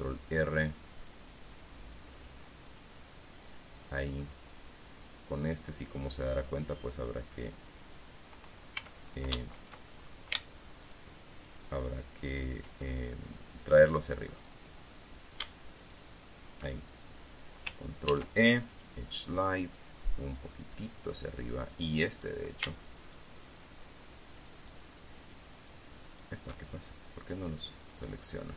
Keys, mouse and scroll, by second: 2.7 click, 4.0 click, 9.3 a, 11.4 alt+shift+right click, 11.9 alt+shift+right click, 12.3 alt+shift+right click, 15.2 right click, 16.3 alt+shift+right click, 18.6 ctrl+e, 19.2 click, 21.3 click, 21.5-22.6 middle drag, 22.6 right click, 23.6 alt+shift+right click, 25.1 alt+shift+right click, 26.1 alt+shift+right click, 26.6 alt+shift+click, 28.4 click.